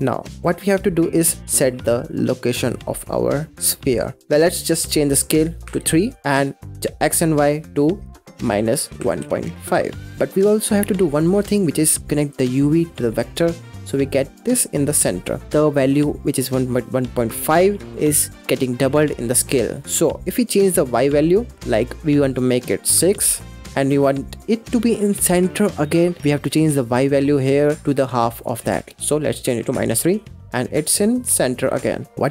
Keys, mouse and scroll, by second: 0.0 scroll up 6, 0.2 middle click, 0.7-2.9 scroll up 3, 3.2-5.0 middle drag, 5.0 click, 6.1-7.2 middle drag, 7.2-10.1 drag, 10.1 middle click, 11.2 click, 12.3 click, 13.7-15.5 middle drag, 15.5-17.1 scroll up 4, 20.5-23.2 drag, 28.2-30.8 drag, 30.8-32.1 middle drag, 32.1-32.3 scroll up 3.